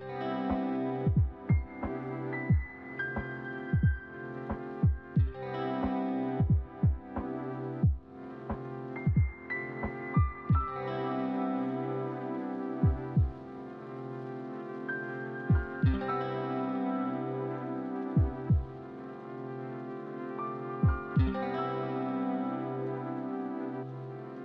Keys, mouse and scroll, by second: 10.2 alt+shift+click, 11.1 alt+shift+middle click, 13.7 alt+shift+click, 14.4 alt+shift+click, 14.9 alt+shift+click, 15.4 middle click, 18.0 alt+shift+click, 21.2 alt+click, 22.4 middle click.